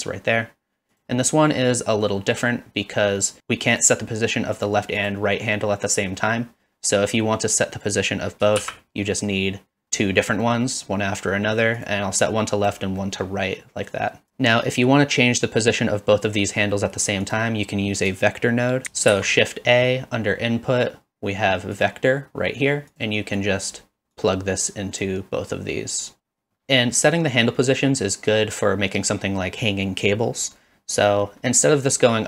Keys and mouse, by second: 3.7 click, 4.6 click, 5.0 click, 8.6 shift+d, 11.8 click, 12.2 click, 13.1 middle click, 14.0 click, 14.3 g, 16.7 middle click, 17.3 click, 19.1 shift+a, 23.4 click, 24.2-25.0 drag, 25.5-26.2 drag, 26.2 drag.